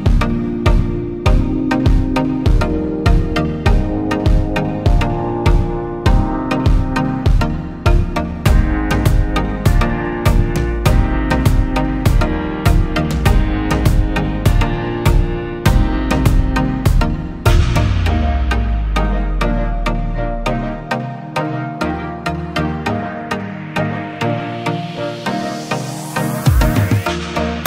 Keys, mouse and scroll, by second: 6.9-8.9 scroll up 1, 12.7 alt+BackSpace, 13.9 ctrl+d.